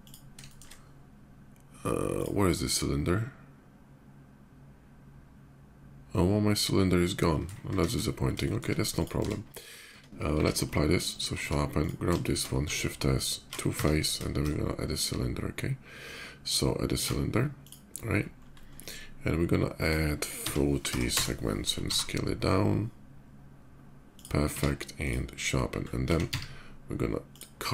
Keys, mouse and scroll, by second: 0.2 shift+middle click, 1.9 shift+click, 2.5 shift+middle click, 7.8 shift+2, 8.2 middle click, 8.7 click, 8.9 Tab, 10.1 q, 10.8 Tab, 10.8 ctrl+click, 11.5 Tab, 11.5 click, 12.0 shift+middle click, 12.9 shift+s, 13.1 shift+s, 13.5 Tab, 14.2 shift+a, 14.5 shift+a, 14.7 shift+a, 17.2 click, 18.0 middle click, 18.3-19.2 middle drag, 19.5 click, 20.2 4, 21.5 Return, 21.5 0, 21.6 s, 23.9 click, 24.8 click, 25.1 middle click, 25.6 middle click, 27.1 click, 27.1 s, 27.1 z.